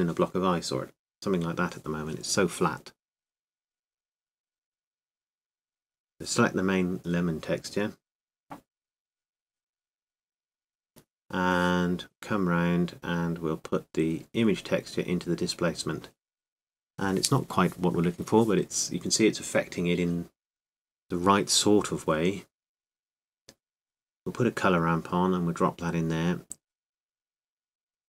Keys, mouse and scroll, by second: 5.0 click, 6.4-16.7 drag, 22.1-25.3 drag, 26.1-28.0 drag, 27.7-28.0 middle drag.